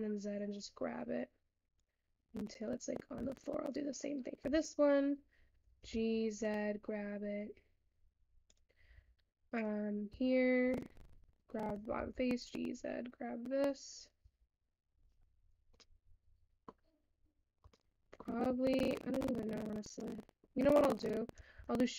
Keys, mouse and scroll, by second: 2.6 click, 3.4 Tab, 3.6 click, 4.5 Tab, 5.1 click, 9.0 Tab, 9.5 click, 10.2 Tab, 10.8 click, 14.3 Tab, 15.8-16.7 middle drag, 16.7-17.7 scroll up 2, 17.7 Tab, 17.9 middle click, 18.2 Tab, 18.3 Tab, 18.6 Tab, 19.4-20.9 shift+middle drag, 20.9-21.5 scroll down 7, 21.5 shift+a.